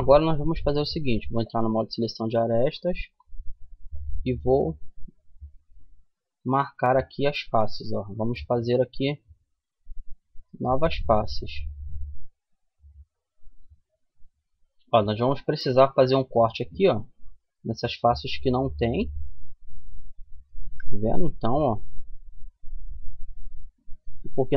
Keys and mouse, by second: 0.7-2.2 drag, 1.9 right click, 2.5 click, 3.7-7.1 drag, 5.1 middle click, 5.2 right click, 6.9 f, 7.5-9.3 middle drag, 12.0 middle click, 15.3-20.1 middle drag, 21.9 right click.